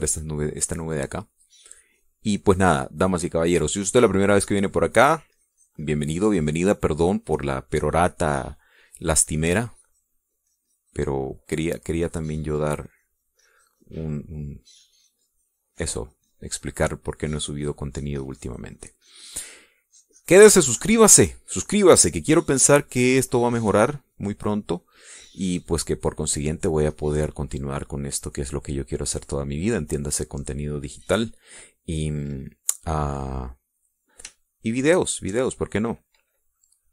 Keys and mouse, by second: 0.8 click, 1.7-2.9 drag, 3.3-4.5 drag, 4.7 click, 5.6-8.5 drag, 9.0 middle click, 10.6-13.1 drag, 13.5-16.0 drag, 16.4-18.5 drag, 18.8-21.5 drag, 21.7-22.8 drag, 24.3 middle click, 24.7 middle click, 26.7 middle click, 31.3 middle click, 31.9 click, 36.4 shift+click.